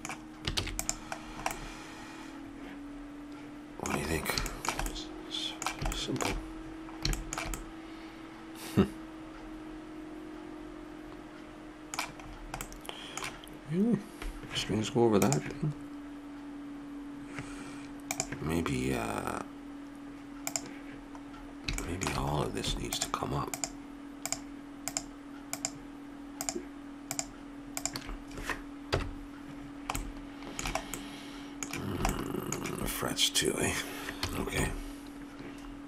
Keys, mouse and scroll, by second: 0.6 ctrl+s, 1.3 middle click, 3.5 middle click, 5.4-9.4 middle drag, 12.3-14.5 middle drag, 20.5-26.4 drag, 28.9 KP_1, 34.2 a, 34.6 KP_7.